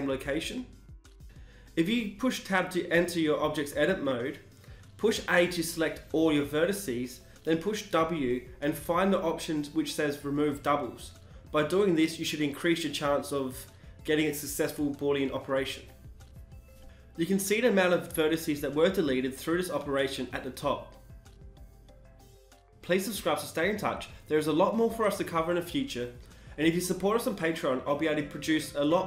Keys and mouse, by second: 0.1 shift+s, 0.3 ctrl+r, 0.3 Tab, 1.4 Tab, 3.7 a, 3.8 a, 7.7 w, 16.1 Tab, 16.9 click, 17.1 click, 17.3 click, 20.2 ctrl+z, 20.2 Tab, 20.2 w, 20.2 a.